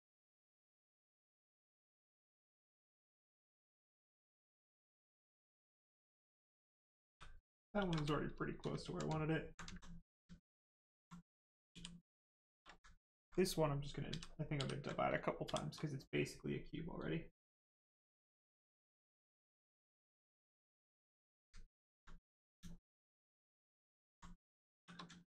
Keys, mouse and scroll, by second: 1.1 click, 3.6 click, 6.0 right click, 7.0 shift+f, 7.7 shift+f, 8.0 right click, 9.2 alt+right click, 11.6 f, 12.9 alt+right click, 13.4 ctrl+right click, 14.0 ctrl+d, 14.5 ctrl+d, 15.4 shift+f, 18.2 click, 22.0 right click, 22.6 alt+right click, 24.3 shift+right click, 24.7 shift+f, 25.1 alt+right click.